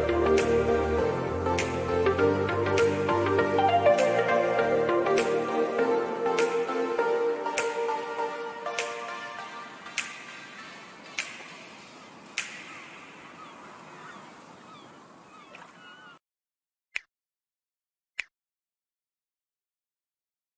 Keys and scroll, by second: 2.0 ctrl+g, 12.5 ctrl+KP_Add, 13.2 KP_Add, 13.9 KP_Subtract, 14.6 ctrl+KP_Subtract.